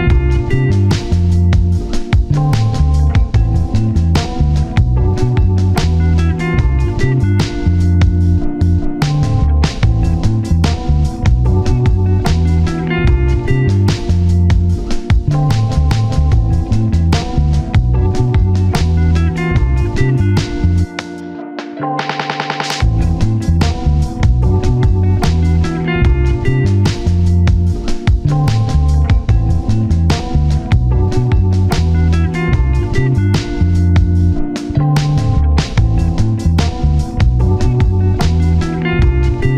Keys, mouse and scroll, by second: 1.7 double click, 3.6 scroll down 1, 6.9 1, 8.3-8.9 scroll up 1, 10.3 double click, 12.4 scroll down 1, 12.5 1, 13.0 scroll up 1, 13.1 scroll down 1, 13.2 1, 13.3 shift+middle click, 13.6 alt+z, 14.3 s, 14.6 alt+z, 15.2 double click, 17.2 1, 19.5-19.9 scroll up 1, 19.9 right click, 21.6 double click, 22.1 shift+middle click, 22.3-23.0 scroll up 1, 27.2 shift+click, 33.4 shift+click, 34.0 1, 35.1-35.9 scroll down 1, 36.2 shift+middle click, 36.3 shift+scroll up 1, 36.4 alt+z, 36.6 alt+z, 36.9-37.4 scroll up 1, 37.4-37.7 scroll down 1.